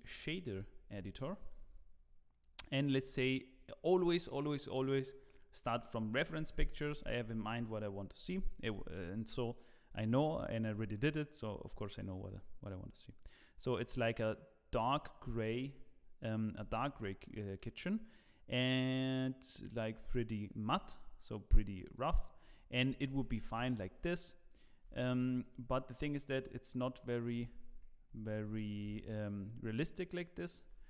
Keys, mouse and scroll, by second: 0.5-1.2 scroll up 1, 1.2 middle click, 1.2 scroll up 6, 11.0 middle click, 11.7 click, 16.5 scroll up 1, 17.3 middle click, 17.3-17.9 scroll up 4, 19.1 click, 21.4 click, 21.4 scroll down 2, 21.8 click, 22.4 scroll up 2, 23.1 ctrl+s, 23.5 z, 25.5 z, 27.6 z, 29.7-30.6 scroll down 3, 29.7 z, 30.6 z.